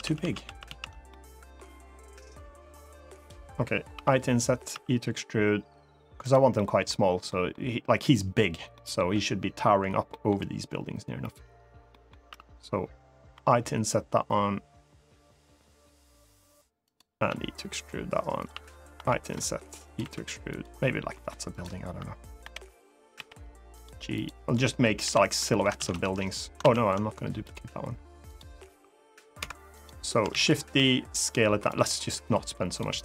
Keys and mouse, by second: 0.2 ctrl+z, 0.4 ctrl+z, 0.8 middle click, 2.1 click, 3.7 i, 4.3 click, 6.0 click, 6.0 e, 6.3 middle click, 7.0 middle click, 8.5 middle click, 9.8 middle click, 11.7 middle click, 13.1 i, 16.6 click, 17.0 e, 18.1 click, 18.7 i, 19.6 click, 19.7 e, 20.2 click, 20.8 middle click, 21.2 click, 22.2 l, 22.9 g, 23.5 click, 23.9 click, 24.8 l, 25.1 middle click, 25.5 shift+d, 25.6 right click, 26.3 ctrl+z, 27.2 click, 28.0 click, 28.3 g, 29.1 Escape, 30.0 shift+d, 30.2 right click, 30.5 s, 31.4 click, 32.0 click.